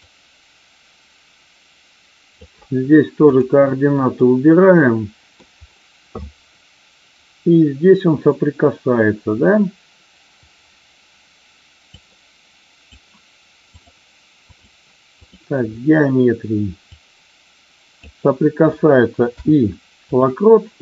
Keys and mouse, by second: 0.1-2.4 drag, 3.1 click, 4.1-5.3 middle drag, 11.9-12.9 drag, 13.8-15.3 drag, 16.9-18.0 drag.